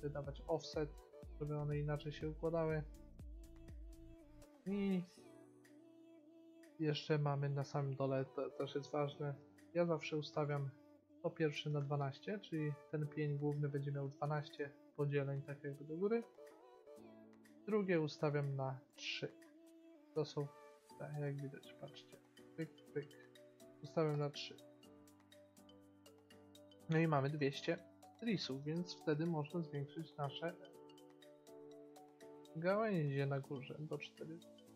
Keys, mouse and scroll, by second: 10.4-12.3 drag, 14.4-16.2 middle drag, 18.5-20.8 drag, 22.1-25.9 drag, 25.9 middle click, 30.1-32.5 drag.